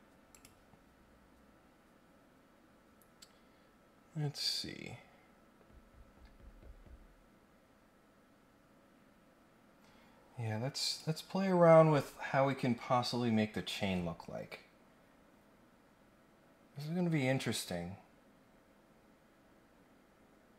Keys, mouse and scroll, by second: 0.3 click, 7.8 scroll up 2, 10.8 click, 12.6 scroll up 2, 12.9-13.4 scroll down 3, 13.6 scroll up 1.